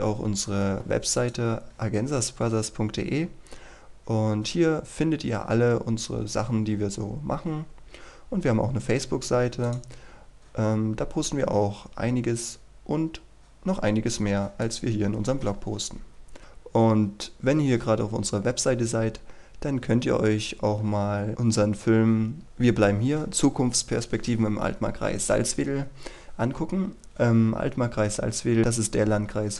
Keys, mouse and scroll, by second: 4.4-5.2 scroll down 1, 5.6-6.5 scroll up 1, 6.5-7.2 scroll down 1, 7.2-9.6 scroll up 1, 9.6 click, 11.0-13.8 scroll down 1, 13.8-14.6 scroll up 1, 14.6 click, 15.7-16.4 scroll down 1, 16.4-17.6 scroll up 1, 17.6-18.0 scroll down 1, 19.2-23.4 scroll up 1, 26.8-29.5 scroll down 1.